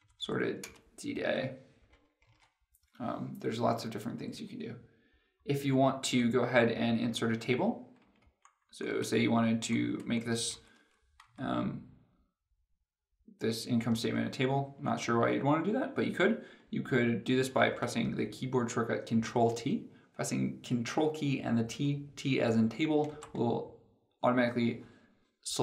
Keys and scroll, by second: 0.5 alt+Down, 2.2 ctrl+z, 23.0 ctrl+t.